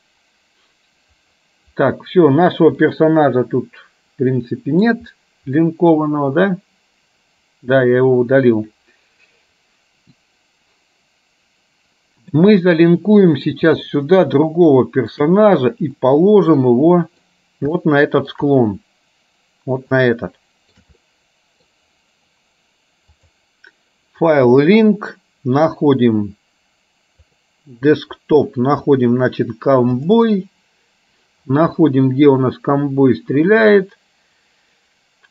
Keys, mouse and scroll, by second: 0.0 click, 3.1-5.2 middle drag, 6.1-12.5 middle drag, 14.0-15.2 shift+middle drag, 16.1-17.3 middle drag, 18.0 shift+middle click, 20.2 shift+middle click, 21.1 middle click, 23.3-25.0 drag.